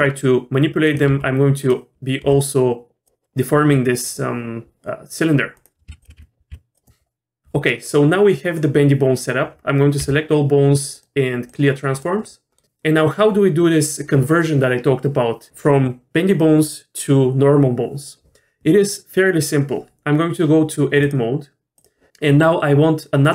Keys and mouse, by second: 1.1 r, 2.2 g, 5.9 r, 6.0 f, 6.2 g, 6.5 g, 10.0 a, 10.9-12.0 drag, 12.6 middle click, 21.0 click.